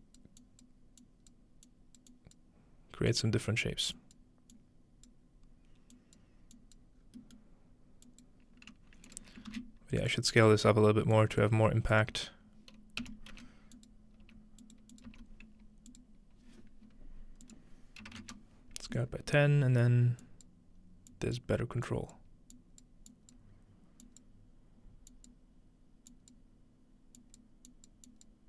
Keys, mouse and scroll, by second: 0.0 click, 0.4 click, 1.0 click, 2.1 click, 3.1 click, 4.0 click, 4.5 click, 6.0 click, 6.6 click, 7.0-8.1 scroll down 2, 7.2-8.7 middle drag, 8.1 click, 8.1-8.7 scroll down 1, 9.1 ctrl+click, 9.5 ctrl+shift+d, 10.1 click, 10.4 click, 11.2 click, 11.9 click, 13.3 typing, 13.8 click, 14.6 click, 14.9 click, 15.9 click, 17.5 click, 18.0-18.7 typing, 19.4 scroll up 1, 20.2 click, 21.1 click, 21.9 click, 22.6 click, 23.1 click, 24.0 click, 25.1 click, 26.1 click, 27.2 click, 27.7 click, 28.1 click.